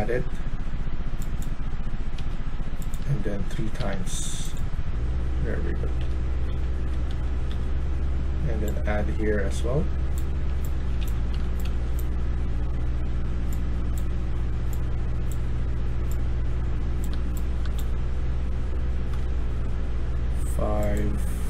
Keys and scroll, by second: 2.1 1, 3.7 3, 5.3-7.4 typing, 10.1-12.1 typing, 17.0-19.1 typing.